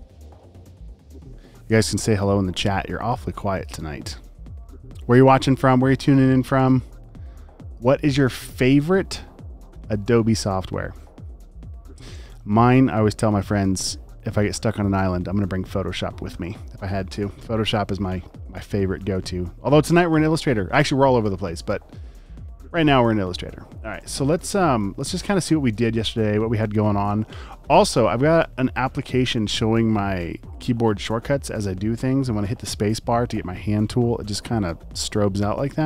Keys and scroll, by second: 7.3 space, 7.8 space, 18.9 space, 23.5 space, 23.9 space, 24.5 alt+super+space, 25.0 space, 25.7 space, 26.7 space, 32.7-35.8 typing.